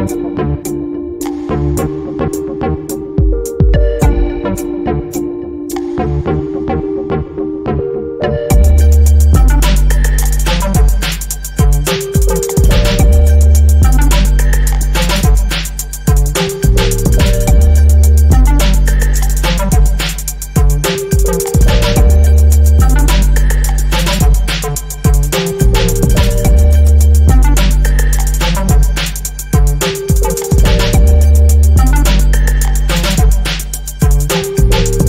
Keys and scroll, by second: 14.9 b, 16.3 i, 17.2 space, 17.5 s, 31.6 a, 33.7 Return.